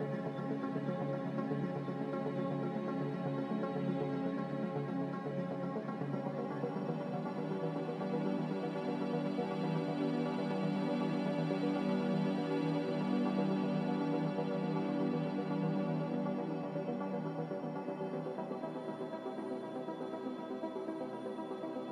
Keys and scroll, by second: 7.2 m.